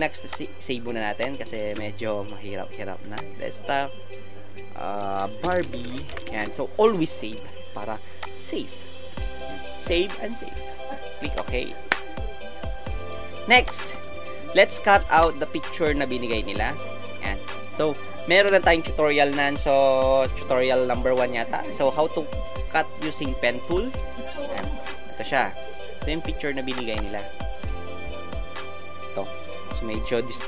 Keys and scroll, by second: 1.6 ctrl+shift+s, 5.5-6.2 typing, 15.0 ctrl+alt+space, 16.3 ctrl+alt+space.